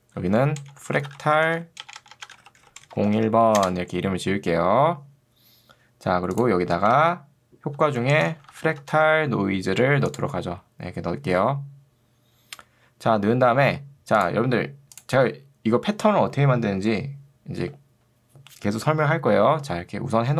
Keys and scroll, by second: 0.7-3.8 typing, 6.9 ctrl+space, 7.9 f, 8.3 BackSpace, 8.5 f, 8.9 c.